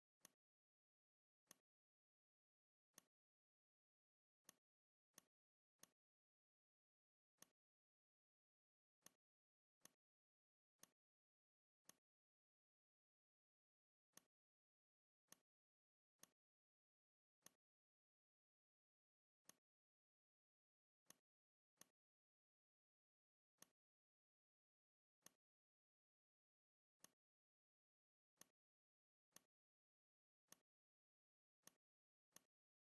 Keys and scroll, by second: 5.6 alt+space, 8.3 v, 23.3 r, 24.5 v.